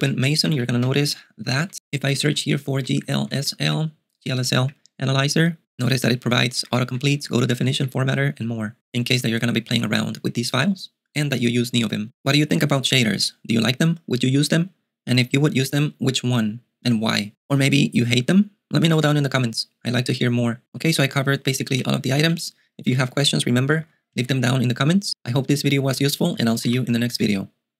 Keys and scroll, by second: 0.5 shift+m, 0.8 a, 1.6 ctrl+y, 1.7 Return, 2.1-3.9 typing, 4.7 Return, 6.6-8.4 typing, 22.6-23.8 typing, 23.8 alt+x, 24.2 alt+x, 25.6-27.7 typing.